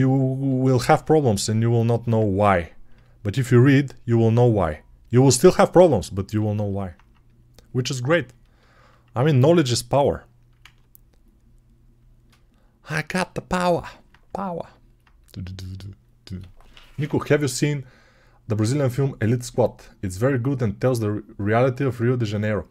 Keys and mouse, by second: 10.5 ctrl+z.